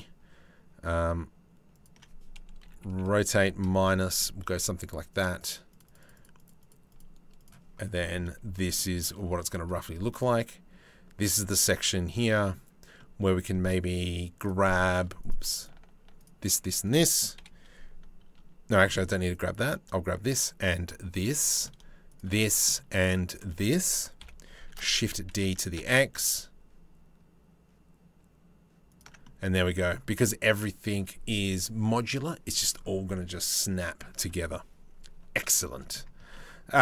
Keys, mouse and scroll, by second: 2.3 r, 5.0 click, 6.0 click, 6.2 click, 6.6 click, 7.0 click, 7.6 shift+click, 8.4 shift+click, 9.7 click, 11.7 middle click, 12.6 middle click, 14.8 click, 15.2 shift+click, 17.0 KP_7, 18.5 middle click, 20.8 middle click, 21.7 shift+middle click, 22.0 middle click, 23.8 KP_7, 24.3 shift+d, 28.8 middle click, 29.8 middle click, 32.8 middle click, 35.2 shift+middle click, 35.8 Tab, 36.0 middle click.